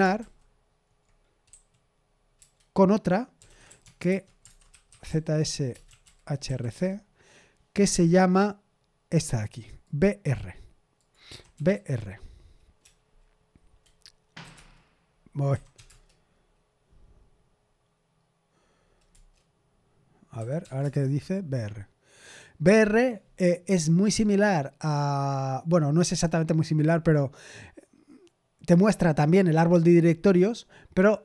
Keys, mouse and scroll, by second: 0.1 super+h, 1.4-6.5 typing, 6.7 Return, 10.4 click, 11.0-16.2 typing, 19.0 Return, 20.1-21.0 typing.